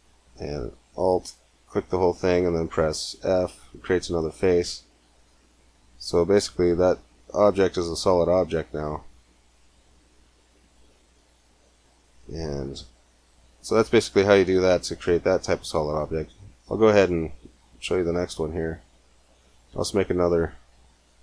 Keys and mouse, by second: 0.5-2.3 drag, 3.0 f, 4.2-5.4 middle drag, 6.0 Tab, 11.5-13.6 middle drag, 15.8 x, 17.2 shift+a, 19.5 g.